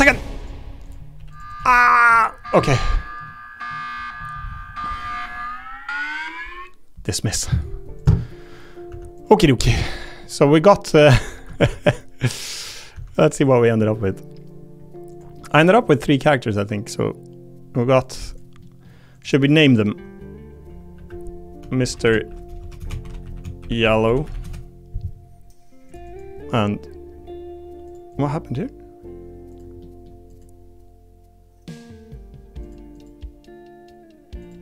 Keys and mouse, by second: 0.8 click, 1.1 g, 1.3 click, 1.6 g, 2.5 Tab, 2.7 click, 2.9 middle click, 8.0 click, 8.3 middle click, 8.9 Tab, 10.2 middle click, 11.6 ctrl+Tab, 12.6 click, 12.9 Tab, 13.1 click, 15.1 click, 15.4 click, 16.5 click, 16.9 click, 18.0 click, 18.2 click, 18.6 middle click, 19.4 middle click, 20.9 F2, 22.8 BackSpace, 24.0 l, 26.0 click, 27.8 click, 28.1 click, 29.5 click, 29.8 middle click, 30.3 click, 32.6 click, 32.9 click, 34.4 click.